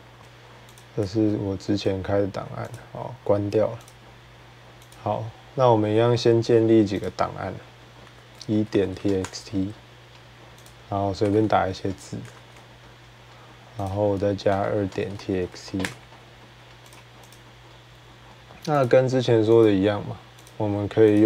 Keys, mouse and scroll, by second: 0.2 ctrl+w, 0.2 click, 0.6 click, 0.9 ctrl+w, 2.5 click, 3.7 click, 4.7 click, 6.9 click, 7.9-9.5 typing, 9.5 middle click, 10.4 click, 10.9-11.8 typing, 11.3 scroll, 12.0 scroll, 12.2 ctrl+s, 13.7 click, 14.0-17.4 typing, 16.8 click, 17.1 click, 18.7 click, 19.4 click, 20.3 click, 21.1 click, 21.1-21.2 typing.